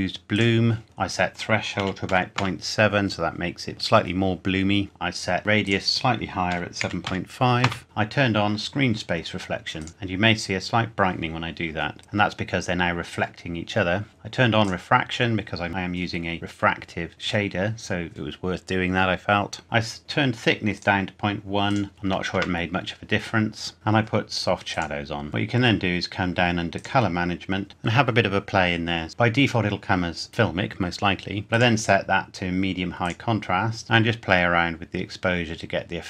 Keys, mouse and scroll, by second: 1.1 click, 1.8 KP_Decimal, 2.1 KP_7, 2.4 KP_Enter, 5.6 click, 6.5 KP_7, 6.8 KP_Decimal, 7.0 KP_5, 7.6 KP_Enter, 7.8 click, 9.8 click, 12.0 click, 14.1 click, 20.7 click, 21.9 KP_Decimal, 22.0 KP_1, 22.3 KP_Enter, 23.7 click, 24.7 click, 25.3-26.5 scroll down 1, 26.8 click, 27.3-27.9 scroll down 1, 31.5 click.